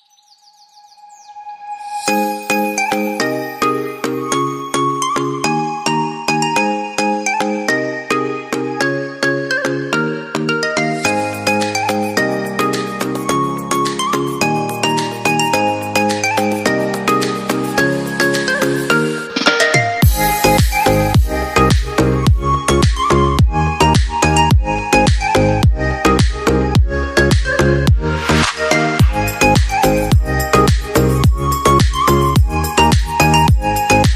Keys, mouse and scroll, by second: 0.9-3.9 typing, 5.7 Return, 6.5-6.8 typing, 8.3-9.2 typing, 10.8 typing, 12.4-16.2 typing, 19.7 double click, 26.2 double click, 29.2 typing.